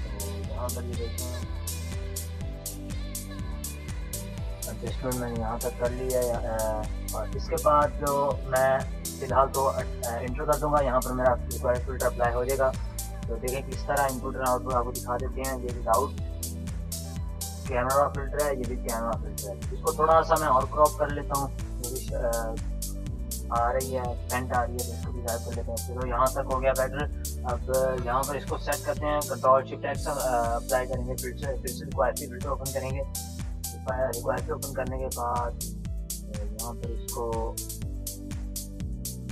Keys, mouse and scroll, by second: 4.4-7.1 drag, 9.7 Return, 12.6 Return, 12.9 space, 13.4 space, 13.5 click, 14.3 click, 14.9 ctrl+-, 15.4 click, 15.4 click, 16.0 ctrl+-, 17.9 click, 17.9 click, 19.7 c, 20.0-25.2 drag, 25.2 Return, 31.5 space, 32.1 space, 34.1-38.7 drag, 38.7-39.3 typing.